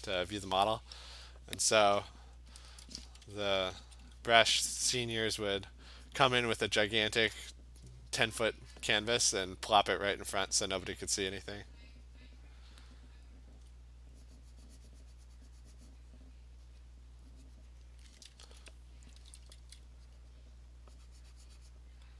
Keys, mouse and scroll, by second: 2.7 alt+click, 3.1-4.1 typing, 3.8 click, 5.7 click, 6.2 click, 6.7 click, 7.1 click, 7.7 alt+click, 8.9 alt+click, 9.0 alt+click, 11.1 alt+click, 12.7 click, 13.7-17.9 alt+click, 16.4 click, 16.8 click, 17.0 click, 17.7 alt+click, 17.8 click, 19.2 [, 19.4 [, 19.6 [.